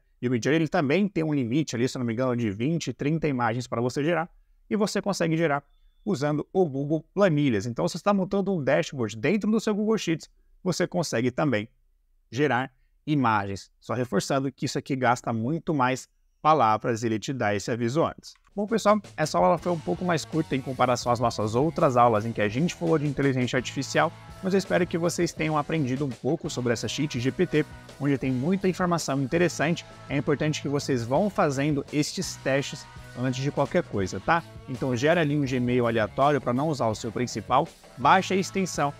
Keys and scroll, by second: 18.3 Up.